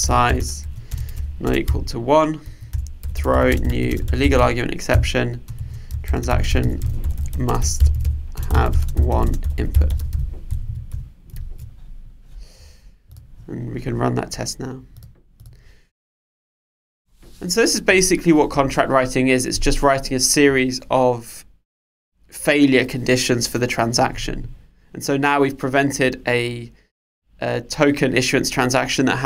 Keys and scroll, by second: 4.9 Return, 11.4 super+s.